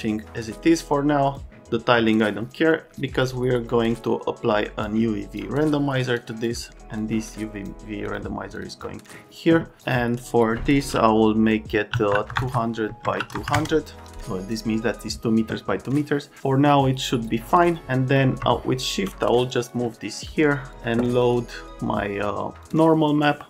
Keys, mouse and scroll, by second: 1.3 click, 1.9 right click, 4.8 click, 6.1 click, 6.9 click, 8.0 click, 8.5 click, 8.7 click, 9.8 click, 11.9-13.3 typing, 12.8 Tab, 16.7 click, 17.6 click, 18.1 click, 18.5 shift+click, 19.4 click, 19.6 click, 20.7 click, 21.2 scroll down 1, 22.6 click.